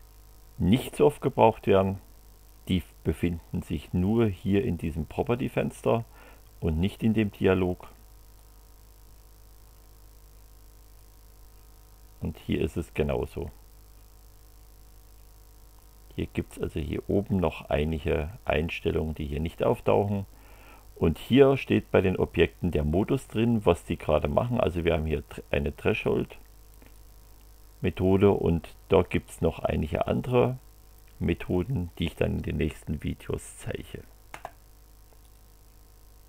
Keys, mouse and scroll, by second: 8.4-9.8 drag, 11.0 click, 12.6 click, 26.0 click, 26.9 click, 35.2 click.